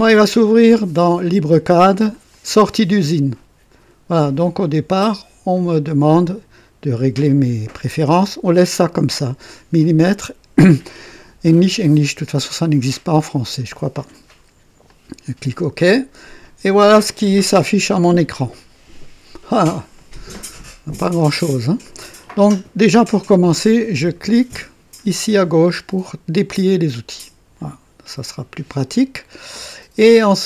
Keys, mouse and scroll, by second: 2.1 click, 14.9 click, 25.7 click.